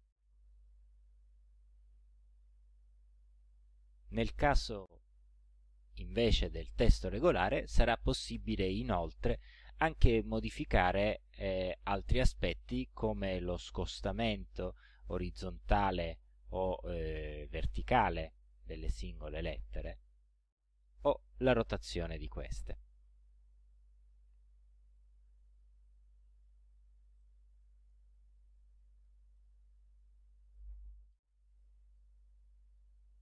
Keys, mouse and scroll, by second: 0.2 ctrl+scroll down 2, 1.2-2.6 ctrl+drag, 5.6 click, 10.7-11.4 ctrl+scroll up 2, 11.7 ctrl+click, 12.6 ctrl+click, 15.8-17.3 drag, 18.6 click, 21.1-22.2 drag, 25.0 click, 25.5 click, 26.1-26.5 ctrl+scroll down 2, 27.2 ctrl+click, 29.4 click.